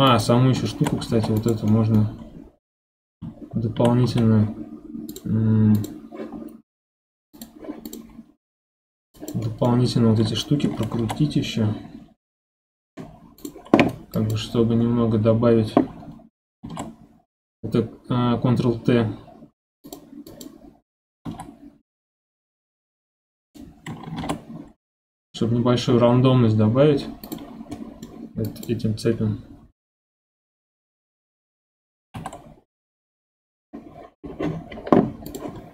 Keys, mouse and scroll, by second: 0.1 click, 0.7 shift+middle click, 1.1 ctrl+Tab, 1.7 middle click, 2.2 scroll up 2, 3.6 scroll down 2, 3.7 1, 4.0 a, 5.1-7.9 drag, 8.7-9.1 scroll up 1, 9.1 click, 9.4 middle click, 9.8 scroll up 1, 10.9 ctrl+t, 14.1 click, 14.8 scroll down 1, 16.6 ctrl+t, 20.3 click, 21.2 r, 24.2 ctrl+t, 27.5 scroll down 4, 27.7 middle click, 28.4 click, 29.1-32.1 scroll up 1, 32.1 ctrl+t.